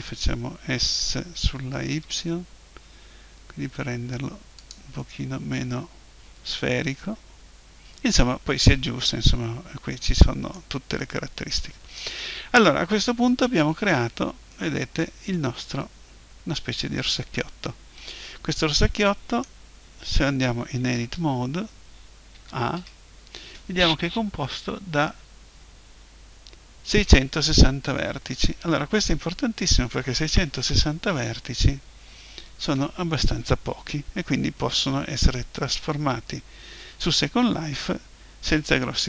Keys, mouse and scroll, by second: 0.9 s, 4.7-6.8 drag, 11.0-13.4 middle drag, 13.4 Tab, 14.5 middle click, 21.0 Tab, 22.3 a, 22.7 a, 35.0-36.9 middle drag.